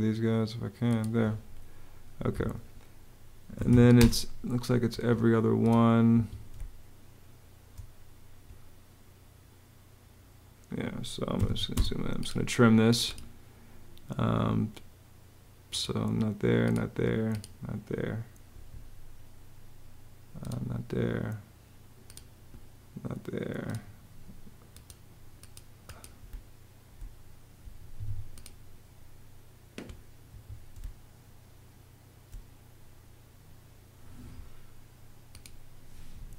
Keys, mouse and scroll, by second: 1.8 Escape, 3.0-3.8 typing, 4.6 Escape, 5.8 Escape, 6.2 space, 10.8-12.4 typing, 25.9 space, 27.4 Escape, 30.1 Escape, 30.4 space, 36.2 Home.